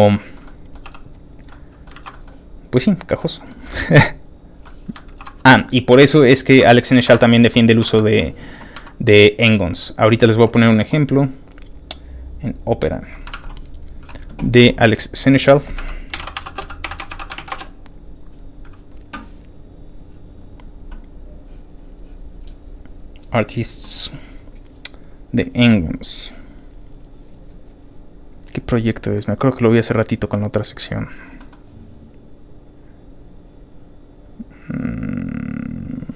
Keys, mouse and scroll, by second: 0.1 shift+middle click, 0.4 middle click, 0.8 g, 1.3 click, 1.5 middle click, 1.9 ctrl+z, 2.1 middle click, 3.0 click, 3.2 middle click, 3.6 scroll down 1, 3.6 middle click, 3.9 g, 4.4 click, 4.8 middle click, 5.1 ctrl+z, 6.7 Tab, 7.8 alt+Tab, 10.2 alt+click, 11.4 alt+click, 12.6 click, 13.3 alt+Tab, 13.8 click, 15.1 click, 15.7 alt+a, 16.2-18.0 typing, 20.4-20.7 scroll down 2, 23.1 click, 24.3 click, 26.3-27.1 scroll down 5, 28.4 scroll down 1, 28.7 scroll up 2, 30.1 scroll down 2, 31.4 middle click, 32.1 middle click, 32.1 scroll down 1, 32.8 scroll down 3, 34.6 middle click, 35.1 middle click, 35.6 middle click.